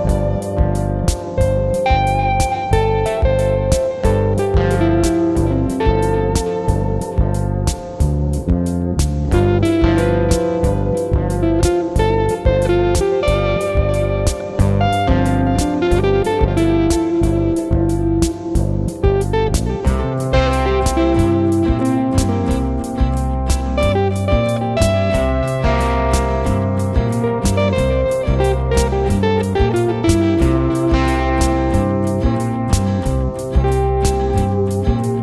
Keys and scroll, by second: 13.6 ctrl+s, 31.6 ctrl+8.